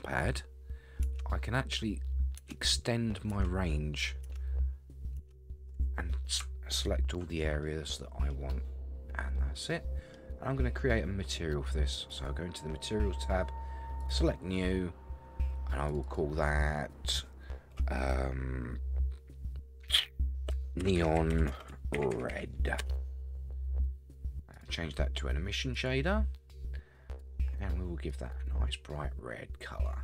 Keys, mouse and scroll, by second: 1.0 ctrl+KP_Add, 2.4 ctrl+KP_Add, 3.3 ctrl+KP_Add, 4.2 ctrl+KP_Add, 5.2 ctrl+KP_Add, 7.6 middle click, 8.5-8.9 scroll up 1, 8.9 scroll down 1, 9.1 scroll down 1, 9.3 middle click, 12.1 click, 14.0 click, 15.9 click, 16.0-23.0 drag, 24.5-25.9 drag, 27.1 click.